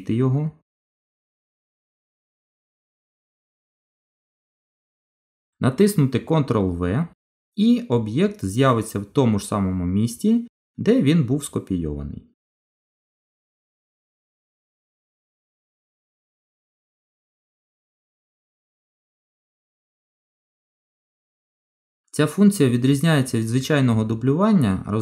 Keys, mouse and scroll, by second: 1.2 scroll down 2, 1.7 middle click, 4.8 click, 6.5 ctrl+v, 7.3 middle click, 13.7 shift+click, 15.0 Delete, 19.5-19.8 scroll up 4, 20.1 middle click, 22.0 scroll down 2, 22.9 scroll down 1, 24.3 g.